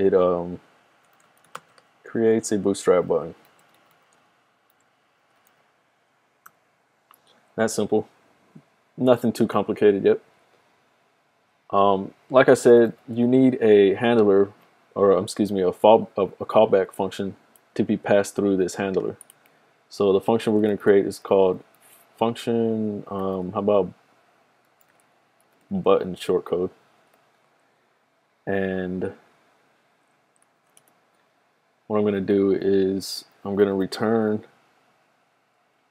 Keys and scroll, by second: 0.9-6.4 typing, 12.4-13.8 typing, 20.6-23.2 typing, 24.6-26.9 typing, 30.4-31.1 typing, 33.5-34.5 typing.